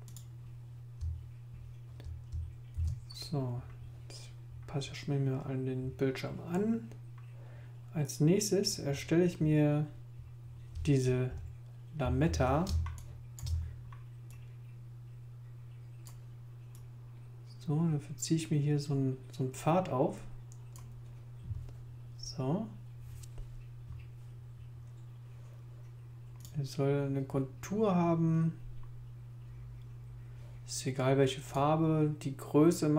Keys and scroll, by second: 2.7 super+i, 12.7 super+space.